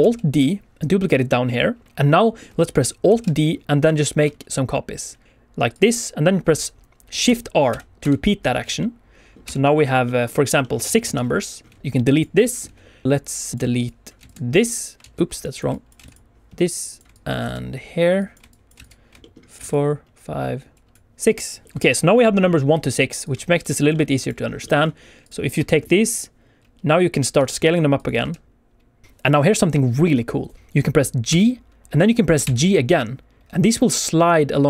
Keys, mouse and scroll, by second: 1.8 click, 1.8 shift+middle click, 3.0 alt+d, 3.4 middle click, 5.7 click, 7.2 shift+r, 7.6 shift+r, 8.0 shift+r, 8.3 scroll down 1, 8.7 shift+middle click, 9.4 shift+r, 9.7 alt+shift+a, 9.7 shift+middle click, 9.7 scroll down 2, 9.7 shift+middle click, 10.6 click, 12.0 x, 13.0 click, 13.5 click, 13.8 shift+click, 14.1 x, 15.0 ctrl+z, 15.3 click, 15.9 shift+click, 15.9 x, 16.7 click, 17.1 shift+click, 17.3 x, 18.1 click, 18.4 shift+click, 18.7 x, 19.1 shift+middle click, 19.6 shift+click, 19.6 x, 20.7 click, 20.9 ctrl+z, 20.9 shift+click, 21.0 x, 21.6 shift+middle click, 21.6 scroll up 1, 22.8-23.2 scroll down 1, 23.2 click, 23.8 g, 23.8 middle click, 24.1 click, 24.4 scroll up 1, 24.6 shift+middle click, 25.2 click, 25.5 Tab, 27.3 s, 27.9 click, 28.0 s, 28.2 x, 29.3 click, 29.8 s, 30.5 Escape, 30.7 Escape, 30.7 g, 31.2 g, 32.3 g.